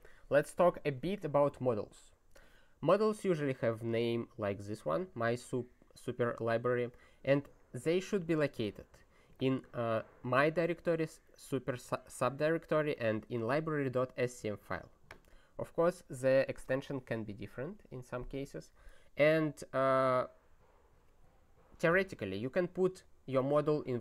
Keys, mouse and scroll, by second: 3.7 click, 4.8 click, 6.9 click, 12.9 click, 14.6 click, 15.1 click.